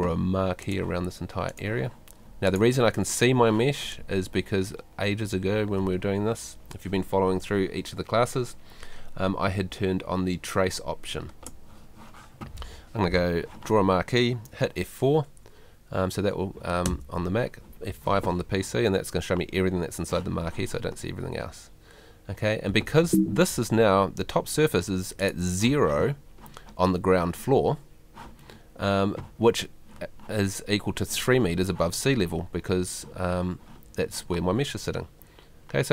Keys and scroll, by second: 16.9 F4, 23.0 Escape.